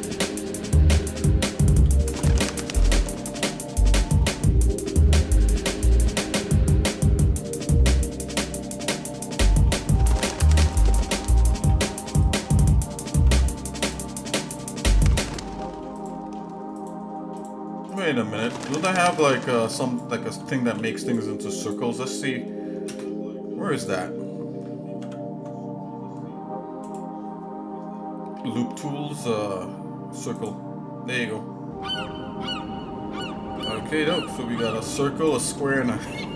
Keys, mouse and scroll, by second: 1.8 g, 9.7 ctrl+r, 11.7 ctrl+r, 13.0 ctrl+Tab, 14.5 click, 15.2 shift+click, 15.9 shift+click, 16.7 shift+click, 17.3 shift+click, 17.9 shift+click, 19.1 shift+click, 19.9 shift+click, 20.6 ctrl+z, 21.0 shift+click, 21.8 shift+click, 22.9 space, 25.0 ctrl+Tab, 26.8-30.6 right drag, 35.2 shift+click.